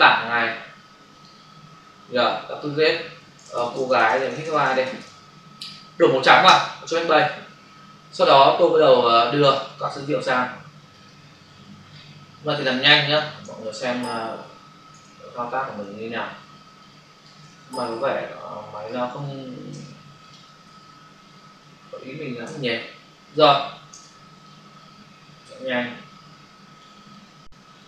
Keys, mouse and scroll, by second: 0.2 click, 0.4 double click, 1.1 click, 2.4 click, 3.3-4.6 typing, 5.0 Return, 6.5 ctrl+BackSpace, 8.8 click, 9.6 ctrl+space, 9.8 ctrl+click, 10.0 ctrl+space, 12.8 space, 13.7 ctrl+-, 15.0 Return, 16.5 space, 17.6 ctrl+-, 18.8 click, 19.7 v, 20.1 click, 23.9 w, 24.4 click, 27.1 click.